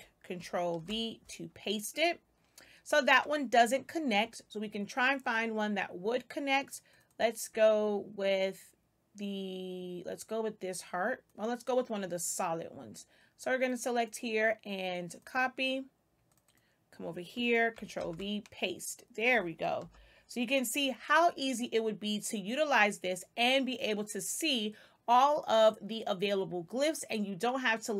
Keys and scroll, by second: 0.7 ctrl+v, 17.9 ctrl+v, 19.7 Delete.